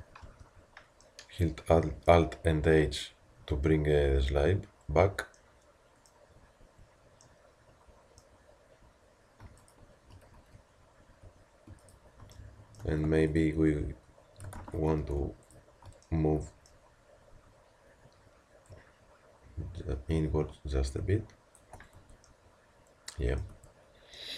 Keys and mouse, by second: 0.3 alt+h, 4.3 a, 6.6 Tab, 10.4 z, 11.2 a, 12.5-14.5 middle drag, 14.6 ctrl+z, 17.3 z, 18.7-20.9 drag, 21.9 Tab, 23.6 Tab.